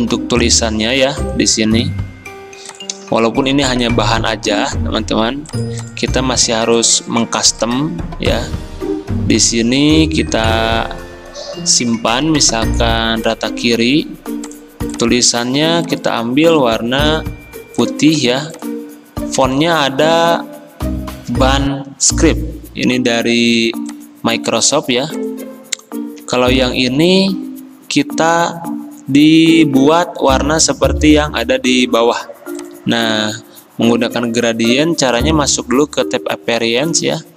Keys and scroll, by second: 16.7 d, 31.1 i.